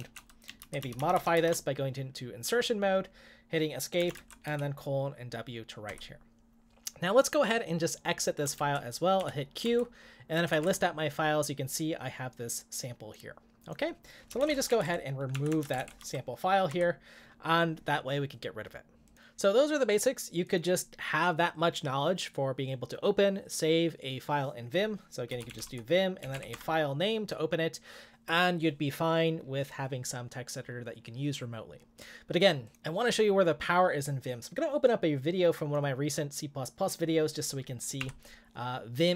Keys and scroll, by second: 0.0-1.1 typing, 0.0 Right, 3.9-4.7 typing, 5.9 Return, 8.5-10.8 typing, 9.6 Return, 14.1-16.3 typing, 16.7 Return, 25.1-26.8 typing.